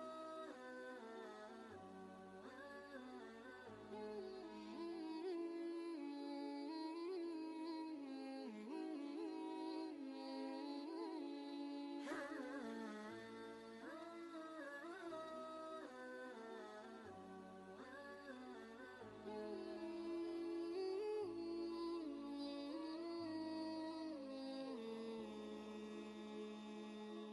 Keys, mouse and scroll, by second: 0.0 ctrl+click, 0.5 alt+click, 1.1 shift+click, 1.4 alt+click, 1.9 shift+click, 2.1 ctrl+space, 2.1 ctrl+click, 2.2 ctrl+space, 2.2 click, 2.7 click, 2.9 ctrl+space, 3.1 click, 3.8 ctrl+space, 3.8 ctrl+click, 4.0 click, 4.3 alt+click, 4.8 ctrl+space, 5.2 click, 5.3 ctrl+space, 5.5 ctrl+click, 5.5 alt+click, 6.2 ctrl+space, 6.9 click, 7.0 typing, 7.1 ctrl+click, 7.3 click, 8.0 click, 8.4-9.6 typing, 9.8 ctrl+Return, 10.1 shift+click, 11.8 scroll down 1, 13.9 scroll down 1, 14.8 click, 15.2-17.6 drag, 18.2 click, 20.2 click, 21.7 click, 21.8 alt+click, 22.0 click, 22.1 ctrl+Caps_Lock, 22.4-23.8 typing, 24.3-27.1 shift+drag, 27.1 ctrl+click.